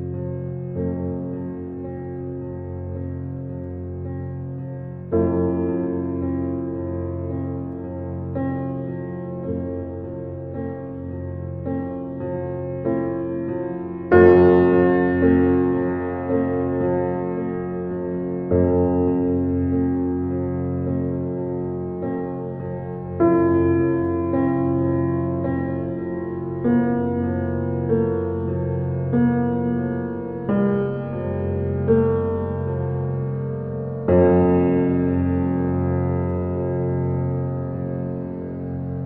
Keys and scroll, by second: 12.4-13.3 typing, 24.7 1, 24.9 3, 25.1 5, 25.3 Return, 38.0 5, 38.2 8, 38.5 Return.